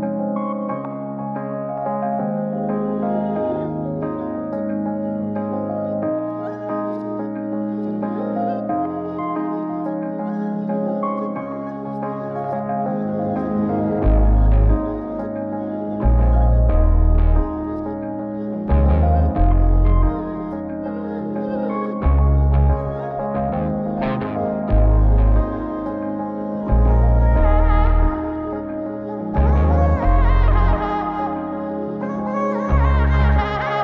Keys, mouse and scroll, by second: 1.8 middle click, 2.4 shift+a, 6.4 z, 8.1 z, 8.6 Tab, 12.5 click, 13.9 click, 15.8-17.8 drag, 18.2 middle click, 19.2-19.9 scroll down 2, 19.9 click, 20.8-21.8 middle drag, 22.2 click, 23.3-24.9 middle drag, 26.6 click, 27.6-29.7 middle drag, 30.0 a, 30.6 x, 33.7 click.